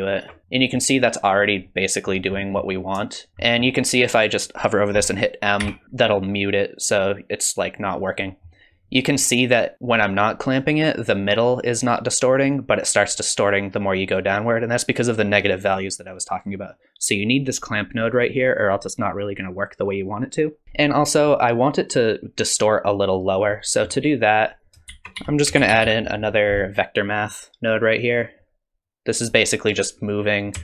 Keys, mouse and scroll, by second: 0.0 ctrl+shift+click, 0.5 middle click, 1.6 middle click, 2.3 middle click, 3.2 shift+click, 3.3 middle click, 3.3 scroll up 3, 3.4 middle click, 4.2 click, 5.6 m, 8.3 middle click, 20.6 click, 20.6 m, 23.5 middle click, 24.5 click, 24.9 shift+a, 28.8 click.